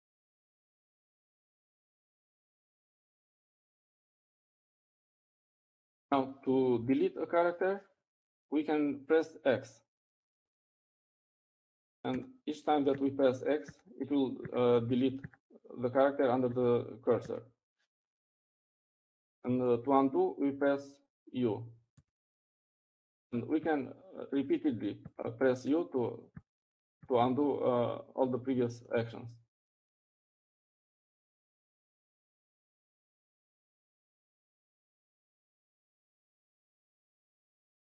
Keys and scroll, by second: 4.5 Up, 6.0-7.5 typing, 14.0-20.9 typing, 25.0-25.4 typing, 26.9-30.0 typing.